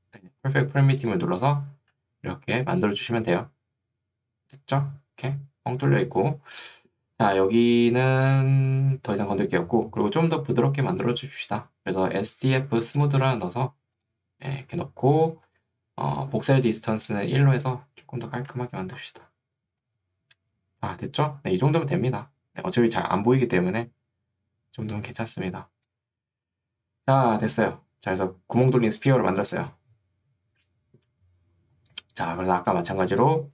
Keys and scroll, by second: 19.8 3.